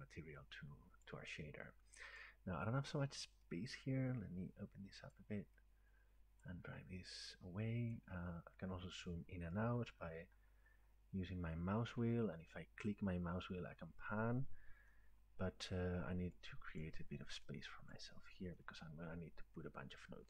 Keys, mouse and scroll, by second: 1.1 click, 2.2 click, 5.1 click, 6.4 click, 7.9 click, 8.5-9.6 scroll down 1, 9.6-9.9 scroll up 4, 9.9-10.3 scroll down 8, 10.1-10.4 scroll up 4, 10.4 scroll down 1, 10.6 scroll, 11.4-11.9 scroll, 12.4-14.9 scroll, 14.9 scroll, 15.5-16.0 scroll, 16.8 click, 17.9 click.